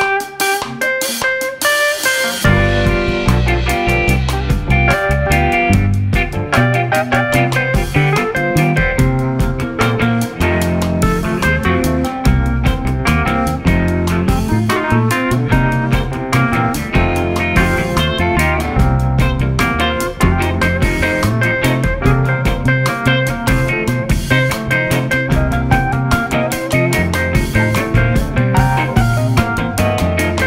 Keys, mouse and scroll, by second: 1.1-2.4 middle drag, 2.4 g, 5.9 KP_3, 7.7 s, 14.1-15.3 middle drag, 15.3 g, 16.9-18.2 middle drag, 18.2-18.5 scroll up 2, 18.5-19.4 middle drag, 19.4 z, 20.0-20.7 middle drag, 20.7 Tab, 21.1-21.5 scroll up 1, 21.5 2, 22.0 click, 23.1 shift+click, 24.3 shift+click, 25.0 shift+click, 26.0 shift+click, 26.9-28.1 shift+drag, 28.1 ctrl+b.